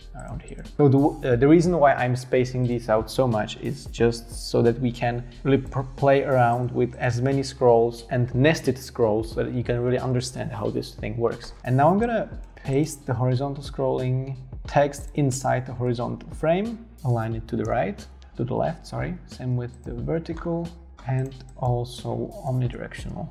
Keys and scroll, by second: 11.9 space, 14.3 super+x, 16.0 super+v, 17.5 shift+Right, 17.6 shift+Right, 20.1 super+x, 21.5 shift+Down.